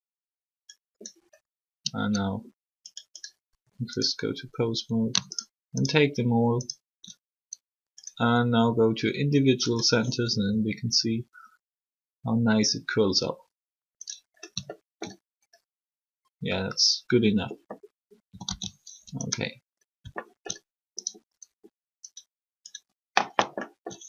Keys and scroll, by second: 10.5 r, 18.2 typing, 18.8 alt+r.